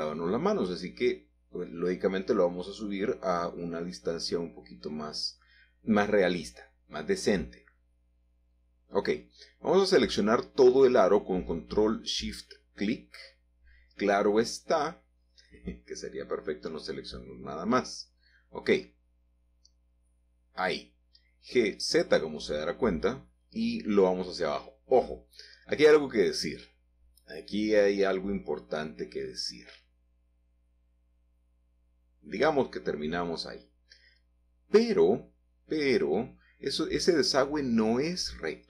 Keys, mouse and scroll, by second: 0.2 g, 0.7 z, 4.9 click, 5.4 Tab, 6.3 scroll down 1, 6.5 scroll up 3, 6.8-7.3 scroll down 2, 7.3-7.9 scroll up 2, 7.9 shift+middle click, 8.6-9.1 scroll up 1, 9.1 1, 11.6 alt+shift+click, 13.0 g, 13.3 z, 14.6 Escape, 15.3 shift+middle click, 16.2 a, 16.4 a, 18.0-19.3 alt+shift+drag, 19.5 ctrl+z, 21.3-22.4 alt+shift+drag, 22.4 g, 22.9 z, 26.0-27.6 scroll down 5, 26.8 click, 28.2 middle click, 28.7 scroll up 2, 28.8-29.6 scroll down 2, 29.6 shift+middle click, 30.5 g, 30.9 z, 33.1 click, 33.4 scroll down 1, 33.6 shift+middle click, 35.0 middle click, 35.2-37.4 middle drag, 38.5-38.6 scroll up 3.